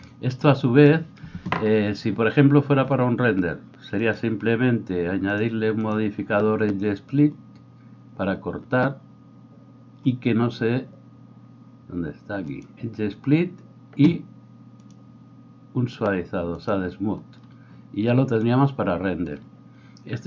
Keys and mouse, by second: 4.2-5.3 middle drag, 5.3-20.2 drag.